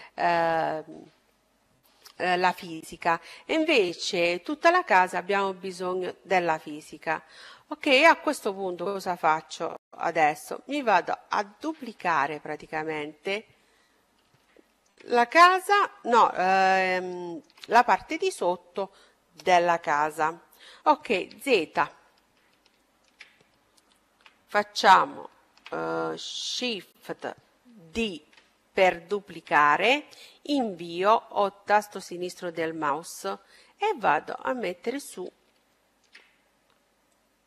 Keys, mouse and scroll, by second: 7.8-10.7 middle drag, 14.2-16.0 middle drag, 16.0 middle click, 16.9-18.8 middle drag, 20.9 z, 22.5-24.3 middle drag, 27.6 shift+d, 31.8-33.6 drag, 35.0-37.4 middle drag, 36.9-37.4 drag.